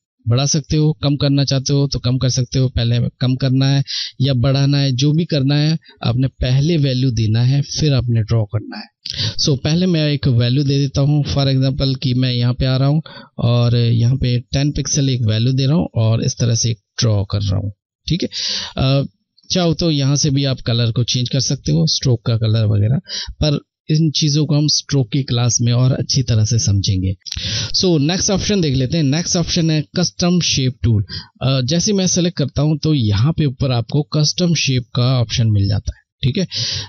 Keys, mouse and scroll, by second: 0.1 click, 9.6 click, 15.3-17.7 shift+drag, 17.8 ctrl+z, 26.9 click, 27.5-30.1 drag, 30.2-32.5 drag, 33.9 click.